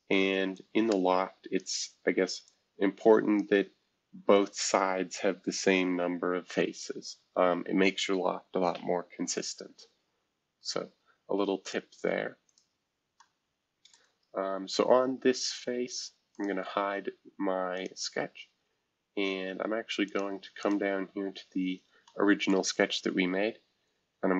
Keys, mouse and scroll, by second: 7.4 shift+F2, 10.4-11.1 scroll down 2, 11.1-11.6 scroll down 1, 11.6 click, 12.5 click, 13.2-15.4 middle drag, 13.2-13.9 scroll up 2, 16.3 click, 17.7 click, 18.4 scroll down 1, 20.0 click, 20.6 click, 22.5 middle click, 22.9 click.